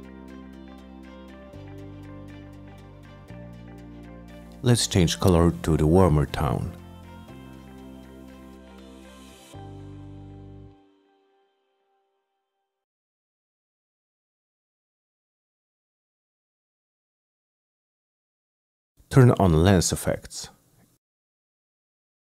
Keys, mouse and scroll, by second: 0.2 click, 1.2-1.6 drag, 2.3 click, 2.5 click, 4.4 click, 5.9 click, 7.1 click, 7.9 click, 8.2 click, 9.2 click, 10.1 click, 10.5 click, 12.7 click, 13.2 F9, 14.9-15.3 middle drag, 17.0 middle click, 20.3 click.